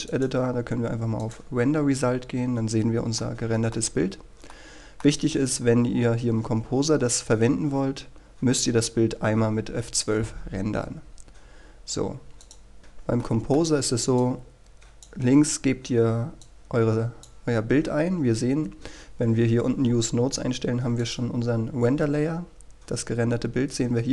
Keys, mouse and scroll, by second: 2.2-3.2 scroll down 1, 3.2 middle click, 4.2-4.6 scroll down 1, 4.6 middle click, 5.4-7.4 scroll up 1, 11.8-12.4 scroll up 1, 12.4 click, 12.7 scroll up 1, 12.8-13.2 scroll down 1, 13.2 middle click, 13.8-14.2 scroll up 1, 14.2-17.8 drag, 21.4-21.8 scroll up 1, 21.8-24.1 scroll down 1.